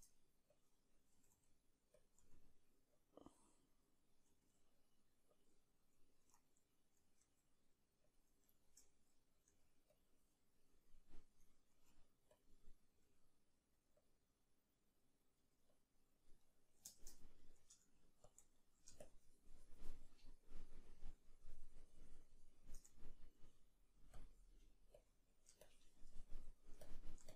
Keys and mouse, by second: 1.1 r, 4.3 s, 8.2 ctrl+a, 9.5-22.7 middle drag, 9.5 g, 12.4 q, 18.3 Tab, 18.3 b, 19.0 shift+click, 22.7-27.3 shift+drag, 22.9 ctrl+middle click, 23.1-24.2 ctrl+middle drag.